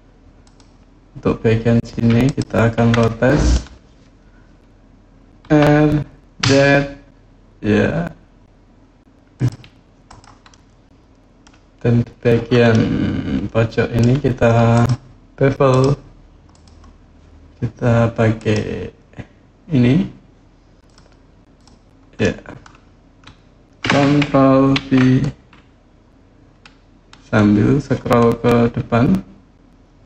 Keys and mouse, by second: 2.0 ctrl+click, 2.9 middle click, 5.2 r, 6.2 z, 9.1 click, 9.8 click, 10.3 middle click, 12.5-13.8 middle drag, 14.5 click, 18.1 click, 20.6 click, 21.3 click, 22.0 middle click, 24.5 ctrl+b.